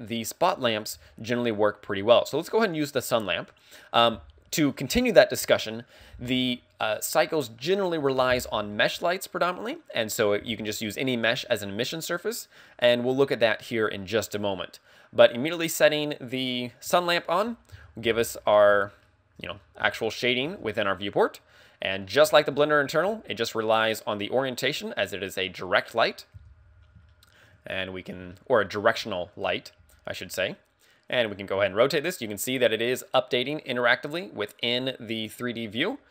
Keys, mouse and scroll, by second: 16.9 KP_1, 17.6 KP_1, 17.8 KP_5, 18.4-19.0 scroll down 3, 19.1 shift+middle click, 19.8 scroll down 1, 20.0 shift+middle click, 21.2 shift+middle click, 21.4-22.3 scroll down 1, 22.3-23.1 scroll down 3, 23.7 r, 26.3 click, 26.4 KP_7, 27.3 shift+middle click, 28.8 shift+middle click, 30.3 r.